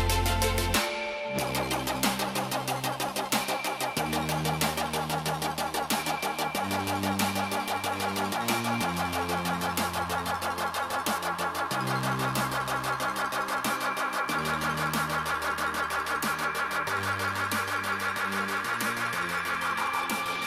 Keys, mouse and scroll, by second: 0.5 alt+scroll up 1, 1.0 scroll down 1, 1.1 alt+scroll up 1, 2.7 click, 5.4 click, 7.4 BackSpace, 8.7 click, 10.1 alt+scroll down 1, 10.7 alt+scroll up 1, 11.2-11.7 alt+scroll down 2, 12.5 click, 17.7 ctrl+g, 20.2 shift+click.